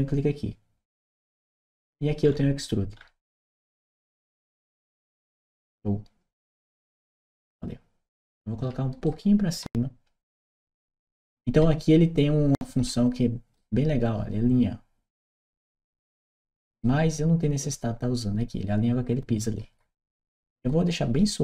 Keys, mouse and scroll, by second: 0.9 click, 2.1 middle click, 2.8 middle click, 4.7 click, 8.9-13.4 right drag, 15.2-16.6 right drag, 19.2-21.4 right drag.